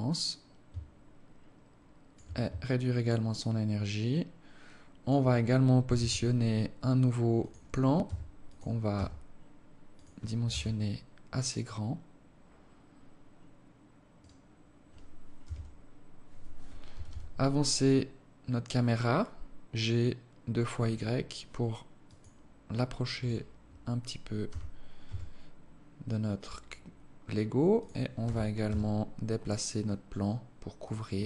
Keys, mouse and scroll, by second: 2.3 shift+click, 5.6 shift+a, 7.7 s, 8.6 s, 10.2 KP_0, 13.8 right click, 15.1 g, 22.8 right click, 24.2 g, 27.9 g, 30.8 s.